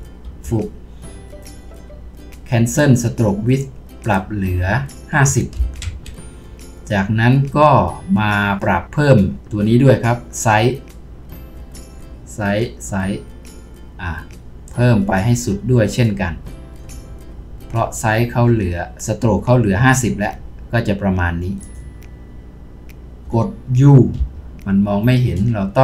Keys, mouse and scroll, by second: 0.3 Delete, 5.8 Return, 12.0-14.0 scroll down 1.